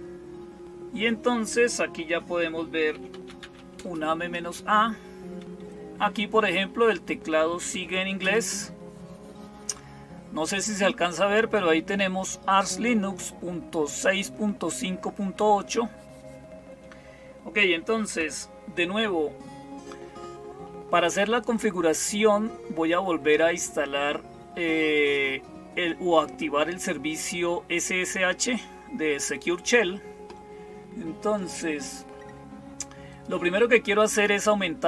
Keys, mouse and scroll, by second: 31.2 click, 32.9 click.